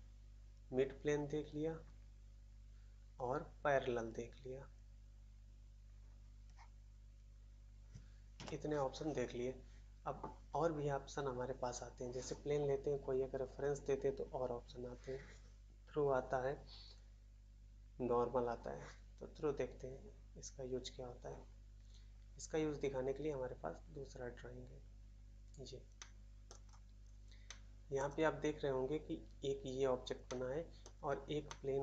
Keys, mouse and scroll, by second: 8.3 shift+a, 25.9 middle click, 26.4 middle click, 26.6 scroll up 1, 27.1 scroll down 1, 27.4 middle click, 27.4 middle click, 27.9 middle click, 30.2 middle click, 30.8 middle click.